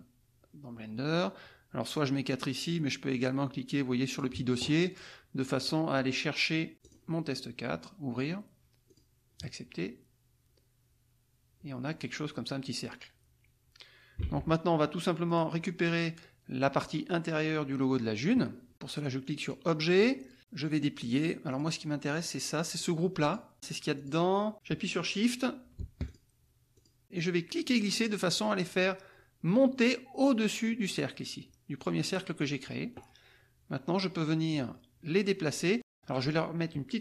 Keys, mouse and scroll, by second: 4.1 click, 6.8 click, 8.9-11.6 drag, 14.2 alt+Tab, 15.2 click, 19.4 click, 21.5-22.5 drag, 22.9 click, 23.3 click, 23.9 click, 26.1 shift+click, 26.8 shift+click, 27.0 Escape, 27.1-31.0 drag, 34.5-36.1 drag.